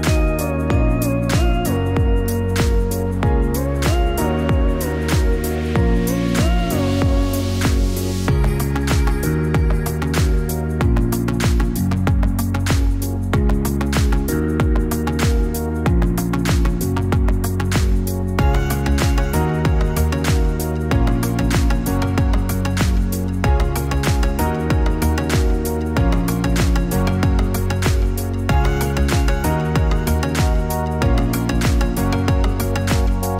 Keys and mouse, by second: 5.2-9.9 drag, 21.1 click, 25.8 click.